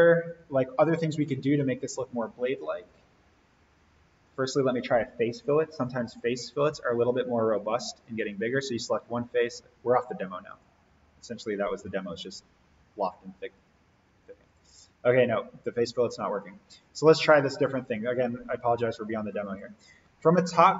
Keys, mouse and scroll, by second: 0.2 click, 1.5 Delete, 2.7 click, 6.6 scroll down 1, 8.0 click, 13.4-18.0 drag, 20.3 alt+s.